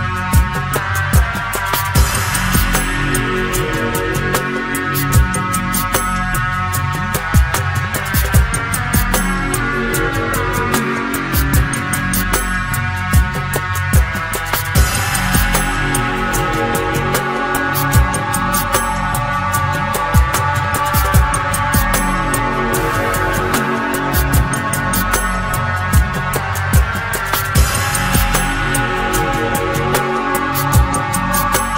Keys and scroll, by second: 3.3 Return, 5.6 Return, 28.4 Return.